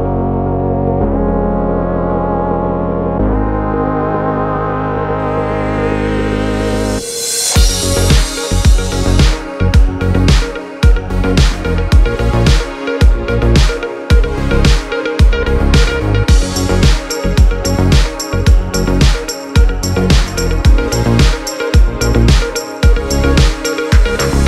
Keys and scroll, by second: 0.1 space, 5.4 space, 14.0 space.